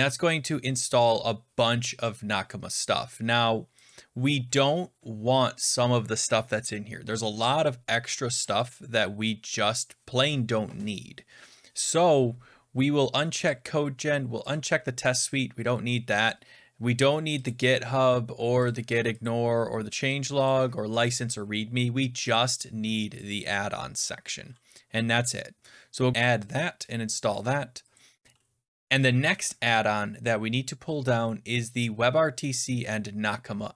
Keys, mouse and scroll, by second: 3.8 click, 8.6 click, 9.4-10.5 scroll down 6, 10.5 scroll up 4, 10.7-11.8 scroll down 3, 13.4 click, 14.4 click, 14.9 scroll, 15.0 click, 17.4 click, 18.6 click, 19.1 click, 20.4 click, 20.9 click, 22.2 click, 23.3 click, 26.4 click.